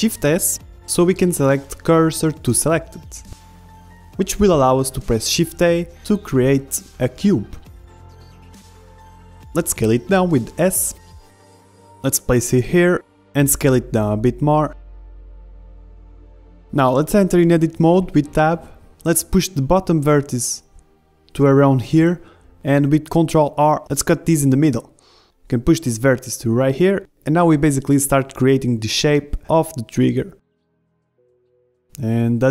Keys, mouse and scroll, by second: 0.5 click, 0.9-4.3 right drag, 1.4 shift+s, 4.8 shift+a, 10.0 s, 12.9-14.7 drag, 13.4 z, 14.2 s, 14.8 middle click, 15.8-18.9 drag, 19.2 Tab, 19.6 a, 20.0 b, 21.4-22.9 drag, 23.0 ctrl+r, 24.4 a, 24.7 b, 25.6-27.5 drag, 27.4 a, 27.6 b, 28.5-30.8 drag, 28.9 b, 30.8 a, 30.9 b, 31.4-32.5 drag.